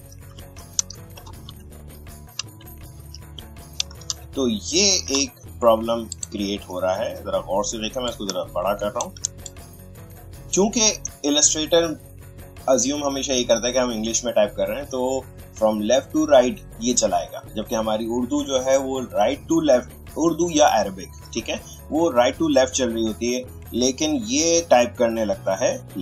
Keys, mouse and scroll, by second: 0.1 shift+p, 1.2 p, 8.1-13.0 shift+drag.